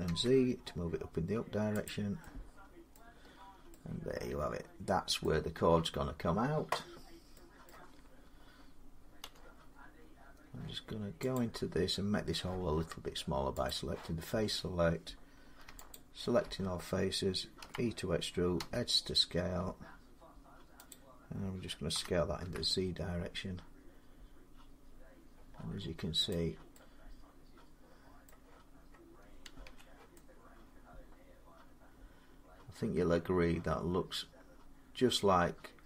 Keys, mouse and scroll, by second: 0.0-0.7 typing, 1.7 click, 2.0-2.5 typing, 2.8 middle click, 3.0 scroll, 3.8 scroll down 4, 5.0 middle click, 6.8 scroll down 1, 7.5 middle click, 7.8 scroll down 1, 9.1 Tab, 9.1-9.6 scroll up 2, 9.6 middle click, 10.0 middle click, 10.1 middle click, 10.2 middle click, 11.2 click, 13.5 click, 13.6 scroll down 3, 15.7 alt+click, 17.4-18.4 typing, 20.7 click, 21.7-25.8 drag, 21.7-22.7 typing, 25.0 z, 26.1-27.5 drag, 28.1 middle click, 28.9 scroll down 2, 29.5 Tab.